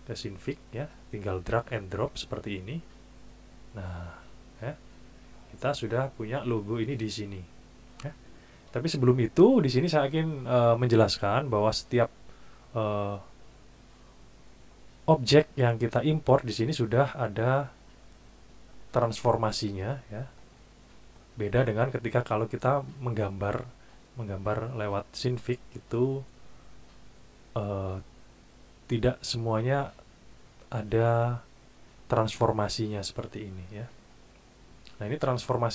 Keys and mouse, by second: 1.5 alt+Tab, 2.1 alt+Tab, 2.1 alt+click.